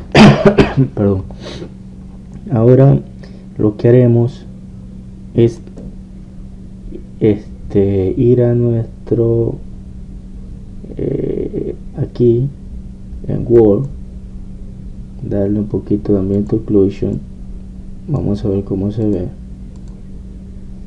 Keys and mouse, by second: 0.0 Escape, 0.0-1.5 drag, 14.6-20.8 drag.